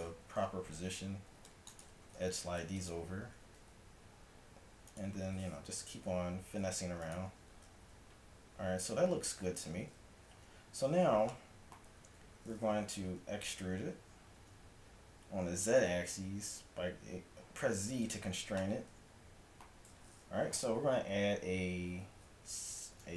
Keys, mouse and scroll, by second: 0.2 a, 1.3 c, 2.1 g, 3.3 g, 5.7-7.8 typing, 9.8 z, 10.2 z, 11.9 a, 13.1 e, 18.3-23.1 middle drag.